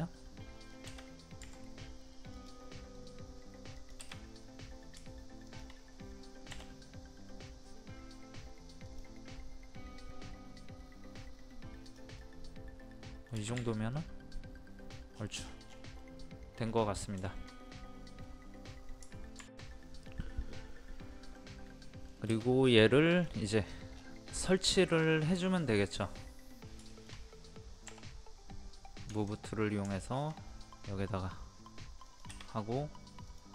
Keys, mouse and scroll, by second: 5.5 shift+click, 8.9 click, 12.2-13.6 middle drag, 13.6 space, 13.9 click, 15.2 scroll down 1, 16.0 middle click, 16.8 scroll up 1, 16.9 scroll down 1, 17.3-18.3 shift+middle drag, 19.4 F2, 21.4 middle click, 22.6 click, 23.6 middle click, 23.7 scroll down 1, 24.3 scroll up 1, 24.6 middle click, 25.8-26.8 scroll down 1, 26.9-28.0 shift+middle drag, 29.1 ctrl+click, 29.9-31.0 shift+middle drag, 32.0 click, 32.5 scroll up 1, 33.3 click.